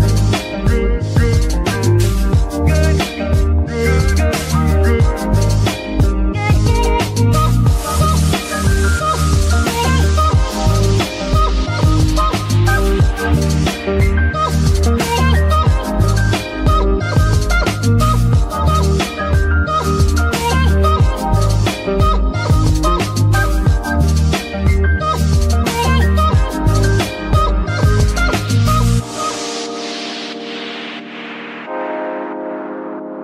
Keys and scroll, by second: 2.0 g, 2.4 Escape, 5.4 g, 5.6 Escape, 8.0 g, 8.3 Escape, 12.0 g, 12.3 Escape, 14.2 g, 14.5 Escape, 24.6 g, 24.8 Escape, 27.4 shift+g, 27.9 Escape, 28.6 g, 29.0 Escape, 30.9 g, 31.2 Escape, 33.0 g.